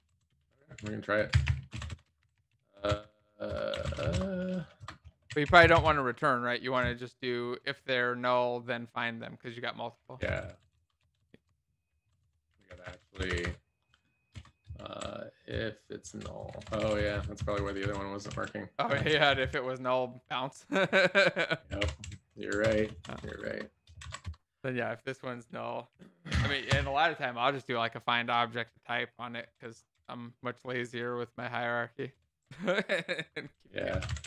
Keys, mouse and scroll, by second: 0.0-3.7 typing, 0.0 Right, 4.1 ctrl+Return, 4.7 Return, 5.2-8.3 typing, 10.2 Escape, 10.2 Up, 10.4 Up, 10.5 Up, 10.7 Up, 14.3 BackSpace, 15.1 shift+[, 15.5 Return, 16.1 Down, 16.5 shift+Home, 16.8 ctrl+Down, 17.3 Down, 17.8 ctrl+v, 18.2 ctrl+z, 19.0 ctrl+v, 19.3 alt+shift+f, 19.8 ctrl+s, 19.8 Up, 20.0 Up, 20.0 Up, 20.2 Up, 20.3 Up, 20.6 shift+Delete, 20.8 ctrl+s, 20.8 Down, 21.0 Down, 21.1 Down, 21.3 Down, 22.6 BackSpace, 24.1 shift+[, 24.2 Return, 24.6 Down, 24.7 Down, 25.4 alt+Up, 26.2 ctrl+s, 26.2 End, 26.6-30.4 typing, 31.5 ctrl+z, 31.9 BackSpace, 32.4 ctrl+space, 33.1 Return, 33.4-34.2 typing.